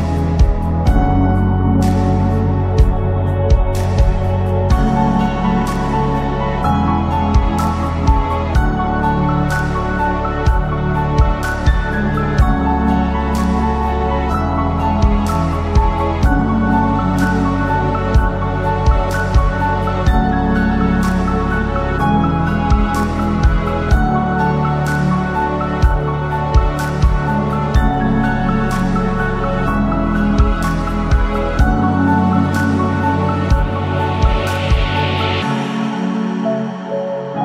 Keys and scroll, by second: 36.6 ctrl+z.